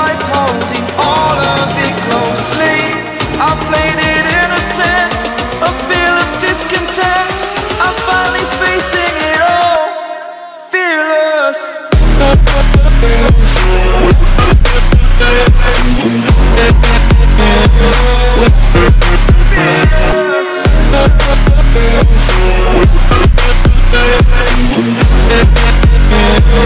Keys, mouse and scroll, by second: 1.2-3.2 typing, 1.5 click, 2.3 click, 3.0 click, 3.2 click, 5.5 [, 5.6 click, 6.4 ], 6.8 click, 7.6-9.0 typing, 7.7 click, 8.0 click, 10.7 typing, 11.7 click, 13.4-15.8 typing, 14.4 click, 15.0 click, 15.3 click, 16.9-19.0 typing, 16.9 click, 17.3 click, 17.5 click, 17.9 click, 18.3 click, 21.3-25.3 typing, 21.4 click, 22.9 click, 23.6 click, 24.2 click, 24.9 click, 25.2 click, 25.5 alt+scroll up 1, 25.7 click.